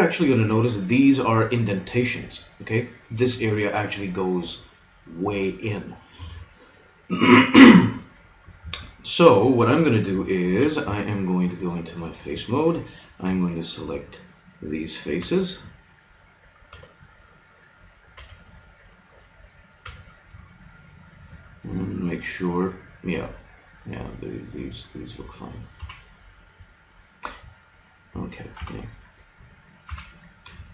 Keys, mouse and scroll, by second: 10.4 ctrl+Tab, 13.2 b, 15.2 b, 16.7 b, 18.2 b, 19.8 b, 21.6-24.0 middle drag, 25.8 KP_3, 27.2-28.7 middle drag, 28.6 KP_1, 29.9 KP_3.